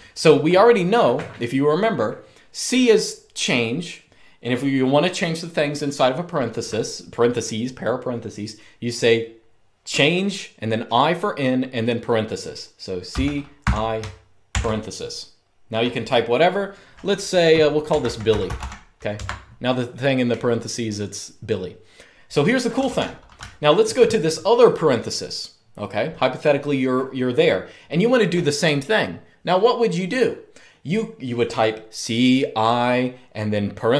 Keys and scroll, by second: 12.8-14.2 typing, 17.4-18.8 typing, 18.9 Escape, 22.5-23.6 typing.